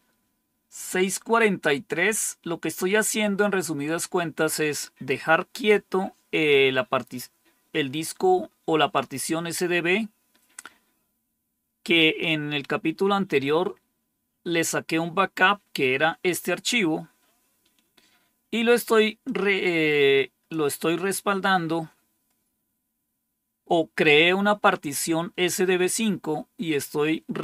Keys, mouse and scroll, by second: 19.2-20.5 drag.